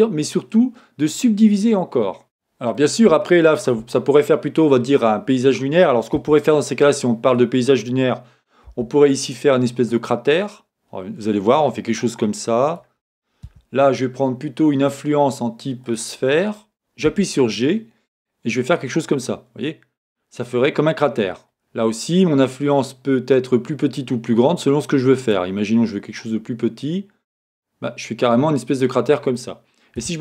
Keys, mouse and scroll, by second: 6.5 Tab, 8.7 c, 13.5 Escape, 14.9-27.4 drag, 27.4-30.2 middle drag.